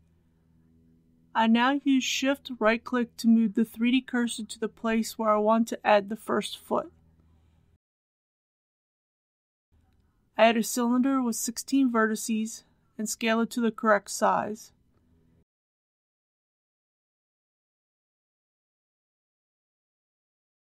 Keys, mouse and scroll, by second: 0.8 KP_7, 7.6 shift+right click, 9.1 KP_1, 10.2 shift+a, 13.6 click, 15.8 KP_1, 16.5 click, 16.9 s, 18.7 click, 19.1 shift+z, 20.1 click, 20.4 scroll up 1.